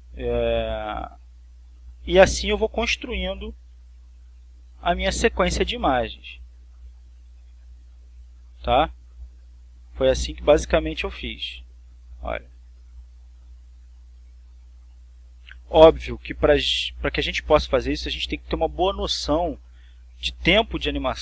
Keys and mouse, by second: 1.4 click, 3.1 click, 4.7 click, 5.7 click, 7.1 click, 8.6 click, 9.9 click, 10.9-12.0 drag, 12.6 click, 13.4 click, 14.7-15.9 drag, 16.3 click, 17.0 click, 18.3-19.4 drag.